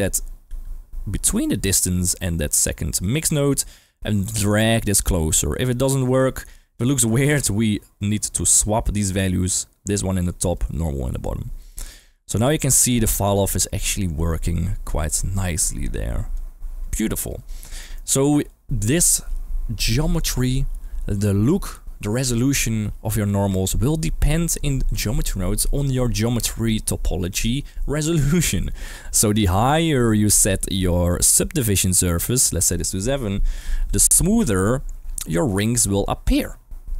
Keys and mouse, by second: 0.4 g, 1.6 middle click, 1.9 g, 3.0 click, 4.2-6.7 drag, 7.1 middle click, 9.2-9.9 drag, 10.5 click, 11.6 middle click, 12.5-16.4 drag, 17.8 middle click, 29.4 middle click, 30.3 middle click, 30.9 middle click, 31.5-31.9 drag, 32.6-34.1 drag.